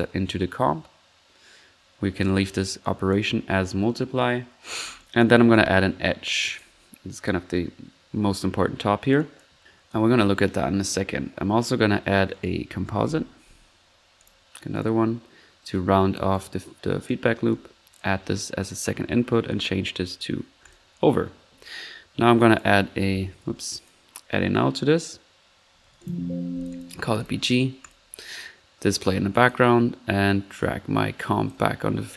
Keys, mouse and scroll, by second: 5.0-6.0 typing, 12.6-13.0 typing, 23.0-23.8 typing, 25.8 typing.